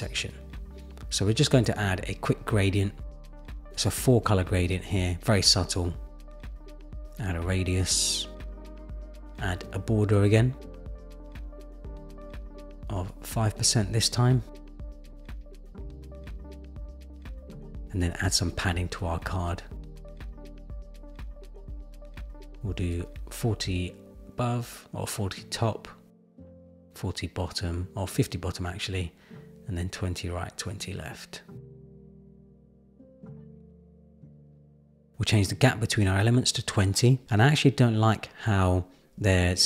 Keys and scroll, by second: 1.6 super+v, 1.7 Return, 2.3 Return, 2.9 Return, 4.4 Return, 23.1 shift+Up, 27.5 shift+Up, 28.1 shift+Up, 28.8 shift+Up.